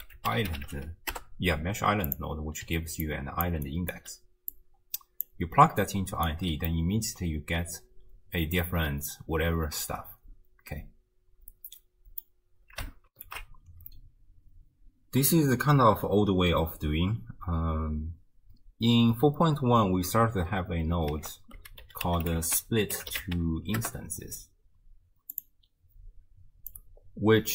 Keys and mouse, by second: 2.6-4.5 typing, 3.1 click, 3.7 click, 4.5-5.3 drag, 5.6 d, 5.8 click, 6.3 d, 6.9-12.3 drag, 6.9 d, 13.1 ctrl+alt+shift+q, 21.2 ctrl+a, 26.8-27.5 drag.